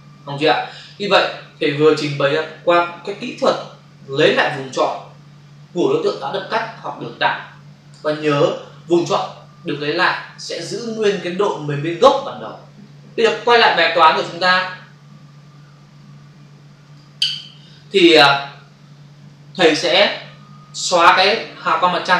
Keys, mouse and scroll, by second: 14.1 f, 16.7 click, 22.0 Delete.